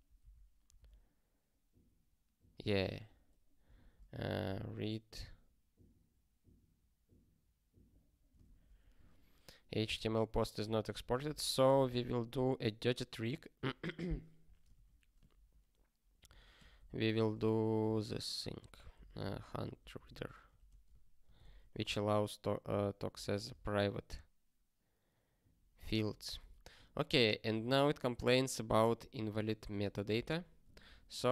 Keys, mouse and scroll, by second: 8.9 super+o, 9.8 ctrl+p, 10.6 ctrl+n, 11.1 alt+b, 11.2 alt+b, 11.9 (, 14.7 alt+shift+s, 15.3 (, 16.2 ctrl+b, 16.6-20.7 typing, 17.5 ctrl+f, 21.4 ctrl+s, 22.7 ctrl+p, 23.1 ctrl+n, 23.2 ctrl+e.